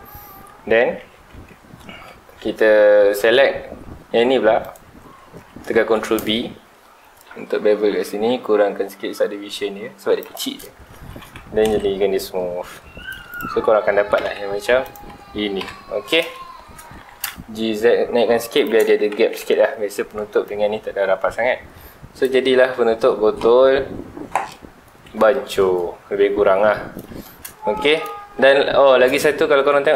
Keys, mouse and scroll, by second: 0.7 scroll up 1, 1.0 alt+a, 1.3 Tab, 2.7 scroll up 1, 3.0 2, 4.6 alt+click, 5.9 ctrl+b, 10.3 shift+click, 10.9 alt+a, 11.2 Tab, 11.6 alt+a, 11.9 scroll down 1, 12.3-12.9 middle drag, 12.9 scroll up 1, 13.3 click, 14.1 KP_1, 14.4 Tab, 14.6 3, 14.8 click, 15.6 ctrl+l, 16.1 scroll up 1, 16.4 shift+middle click, 16.8 scroll up 1, 17.1 g, 18.6 shift+click, 18.8 alt+a, 19.1 Tab, 19.4 alt+a, 19.6-20.6 scroll down 2, 20.6 scroll up 2, 21.3 scroll down 1, 22.1-24.4 scroll up 2, 24.4-26.9 middle drag, 26.9-27.8 scroll down 4, 27.1 shift+middle click, 27.8-28.4 middle drag, 28.4 scroll up 2.